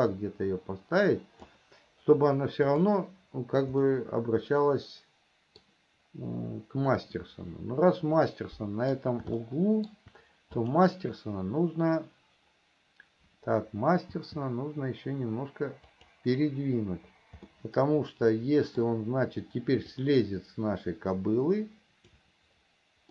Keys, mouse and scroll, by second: 3.1-4.2 drag, 4.2-6.1 middle drag, 8.7 middle click, 9.7 shift+middle click, 10.9 click, 14.4 g, 17.8-19.2 middle drag, 20.4-22.6 drag.